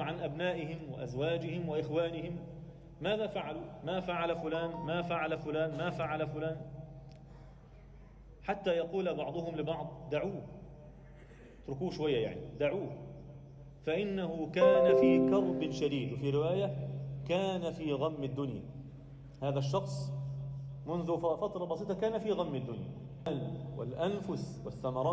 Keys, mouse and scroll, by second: 0.6 click, 2.9-5.6 drag, 2.9 BackSpace, 3.1 BackSpace, 6.4 alt+a, 6.8 click, 7.3 Tab, 7.9 2, 8.3 click, 9.1 KP_1, 10.2 shift+d, 11.5 p, 12.5 Tab, 12.9 click, 13.9-14.7 scroll up 1, 14.7 1, 16.4 Tab, 16.8-17.7 scroll up 1, 23.2 F10, 23.2 shift+middle click, 23.2-24.1 scroll up 2, 24.1 alt+shift+middle click, 24.5-25.1 scroll up 1.